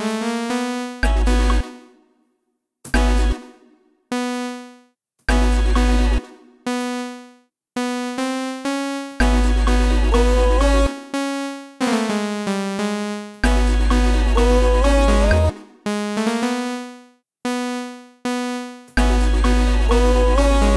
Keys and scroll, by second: 0.9 space, 2.2 Left, 2.8 space, 5.2 alt+space, 6.1 space, 6.8 alt+space, 9.1 alt+space, 10.7 space, 13.3 alt+space, 14.2 space, 15.4 space, 18.9 alt+space, 19.8 space.